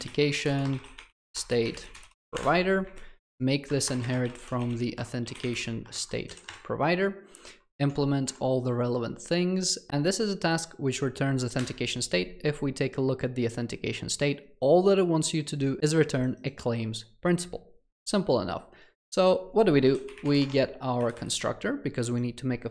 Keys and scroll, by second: 6.6 Return, 7.6 alt+Return, 13.1 ctrl+b, 20.6 Tab.